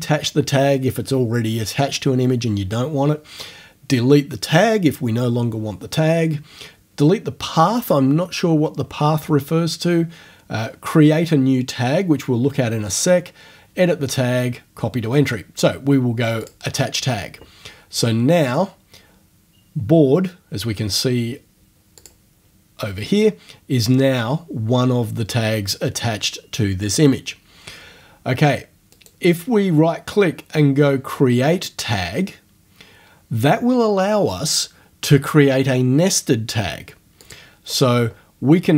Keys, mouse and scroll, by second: 16.4 click, 22.0 click, 29.0 right click, 37.2 click.